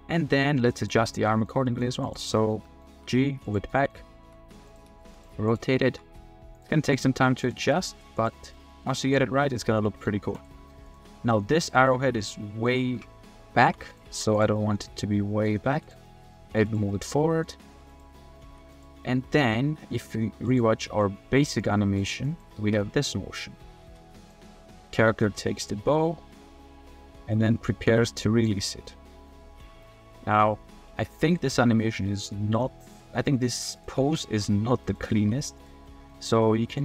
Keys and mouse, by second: 0.8 click, 1.3 click, 1.6 middle click, 2.0 click, 2.3 click, 2.6 click, 2.9 g, 3.7 drag, 4.3 r, 4.8 r, 4.9 r, 5.5 click, 5.9 r, 6.5-7.5 drag, 7.7 drag, 8.5 click, 9.1 click, 9.5 click, 9.8 drag, 10.3 middle click, 10.8 middle click, 11.3 middle drag, 11.9-12.6 middle drag, 13.6 g, 13.9 click, 14.1 g, 14.3-15.4 drag, 15.6 g, 16.0 drag, 16.5 g, 16.9-17.4 drag, 17.5 r, 17.7 r, 18.1 click, 18.4 g, 19.0-19.5 middle drag, 19.8 middle drag, 20.1 click, 20.4 g, 21.6-22.0 drag, 22.2 drag, 22.6 space, 22.8 drag, 23.8 space, 24.3-28.5 drag, 28.8-29.3 middle drag, 29.6-30.4 middle drag, 31.1 drag, 31.5-32.9 drag, 33.7 click, 34.3 g, 35.2 g, 35.8 middle drag, 36.7 drag.